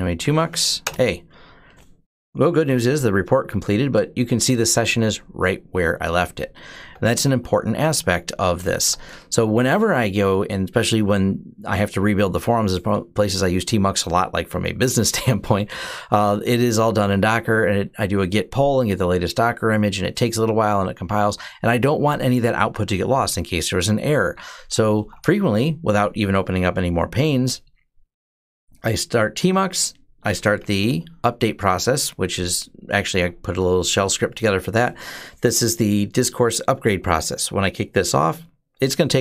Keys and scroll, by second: 0.0-0.7 typing, 6.4-8.6 typing, 24.2-25.3 typing, 30.1-31.0 typing.